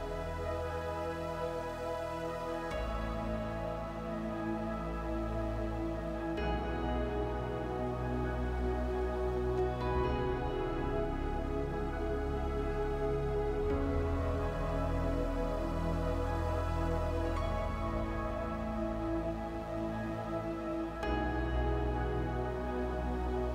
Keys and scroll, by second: 3.9 space, 6.0 Right.